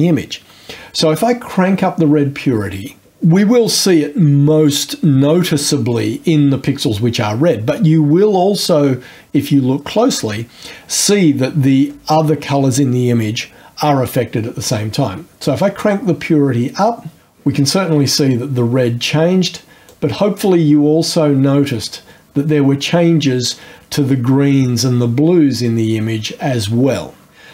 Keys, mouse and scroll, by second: 15.6-17.2 drag, 17.2-19.9 scroll up 2, 19.9-27.5 drag.